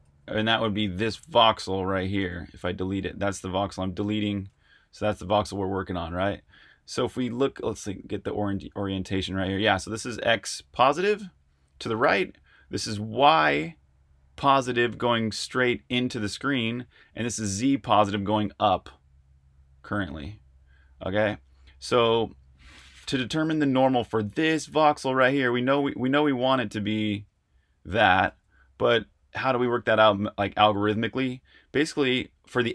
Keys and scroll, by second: 1.0 r, 4.5 super+z, 25.1 t, 28.2 super+z.